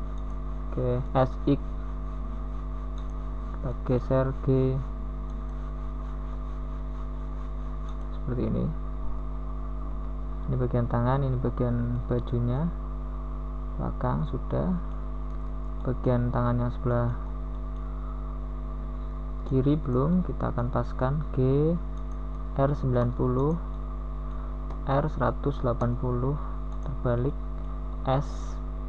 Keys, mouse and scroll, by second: 0.8 shift+g, 3.2 r, 5.3 g, 10.1 s, 16.0 s, 19.4 g, 21.2 g, 24.6 KP_1, 26.1 Tab.